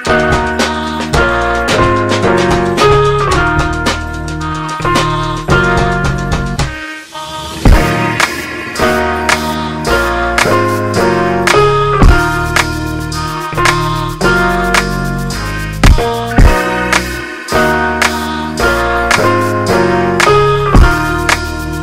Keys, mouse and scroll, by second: 10.8 g, 21.4 g.